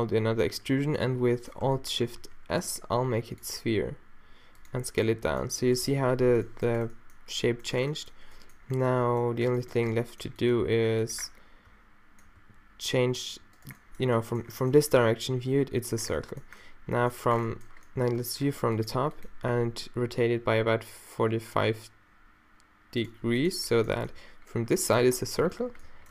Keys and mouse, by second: 3.7 alt+shift+s, 6.1 -, 12.4 r, 19.5 r, 23.1 middle click, 24.1-26.1 middle drag.